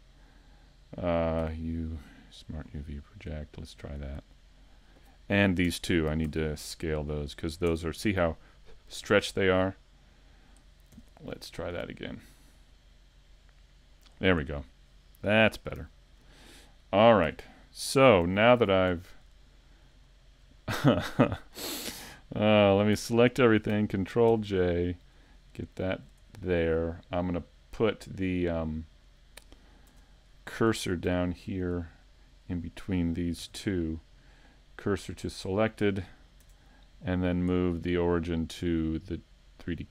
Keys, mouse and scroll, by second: 5.7 Tab, 7.7 Tab, 16.2 scroll down 3, 17.3 Tab, 18.1 scroll down 1, 18.2 a, 19.6 shift+middle click, 20.1 middle click, 20.6 shift+middle click, 22.9 a, 29.0 right click, 29.9 Tab, 31.5 right click, 32.2 shift+right click, 32.7 middle click, 33.4 shift+s, 36.5 Tab.